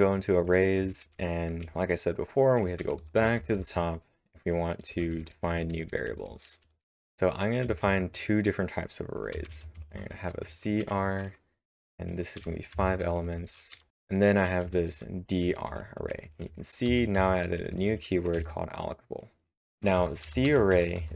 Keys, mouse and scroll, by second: 2.0-4.3 typing, 5.5 typing, 6.9-7.8 typing, 9.1-10.8 typing, 13.1-18.9 typing, 20.5-21.1 typing.